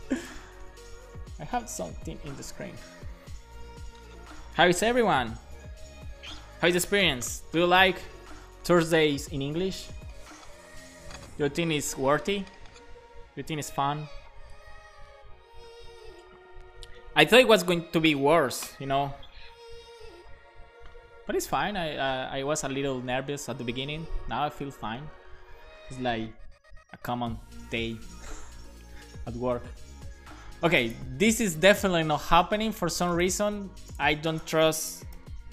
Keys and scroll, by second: 35.2 ctrl+c.